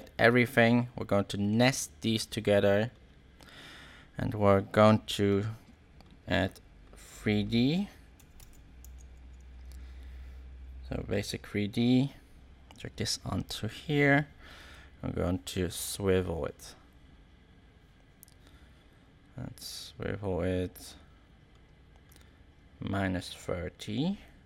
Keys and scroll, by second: 7.9-8.8 typing.